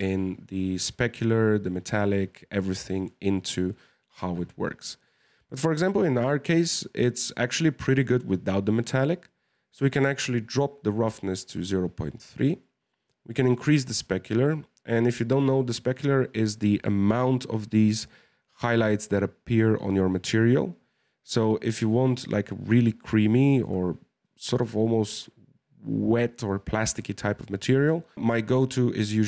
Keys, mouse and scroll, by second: 6.5-15.6 drag.